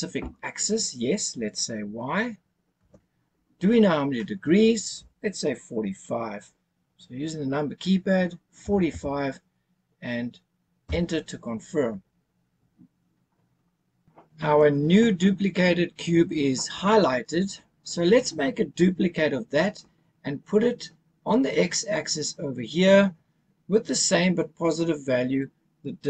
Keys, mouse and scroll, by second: 2.8 y, 8.6 KP_4, 8.9 KP_5, 10.8 KP_Enter.